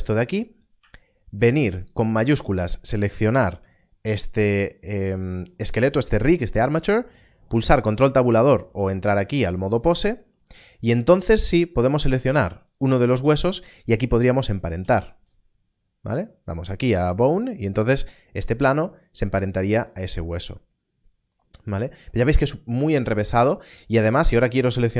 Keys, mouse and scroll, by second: 9.0 click, 14.8 ctrl+p, 24.1 ctrl+p, 24.4 click.